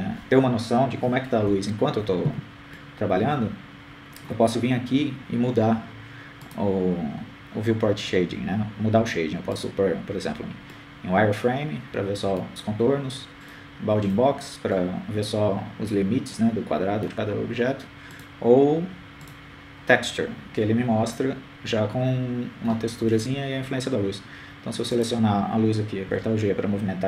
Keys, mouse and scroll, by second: 3.4 F11, 5.1 KP_0, 6.2-7.4 middle drag, 9.8-11.0 drag, 14.1-15.5 middle drag, 16.7-18.1 drag, 18.1-19.3 middle drag, 21.5-22.6 drag, 23.8-25.0 middle drag.